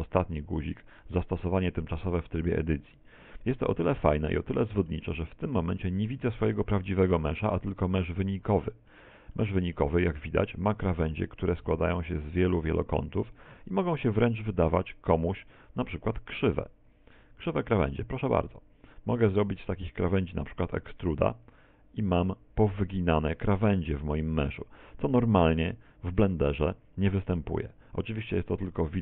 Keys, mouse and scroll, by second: 1.1 click, 3.3 middle click, 4.4 shift+middle click, 5.2-5.7 scroll up 5, 6.0 shift+middle click, 6.7 middle click, 7.8 right click, 8.2 middle click, 9.4 middle click, 10.1 middle click, 10.9-11.7 scroll up 5, 13.6-14.4 scroll down 7, 14.4 shift+right click, 14.8 shift+right click, 16.2 shift+right click, 17.0 shift+right click, 17.3 z, 17.9 middle click, 18.4 middle click, 20.8 e, 27.7 click.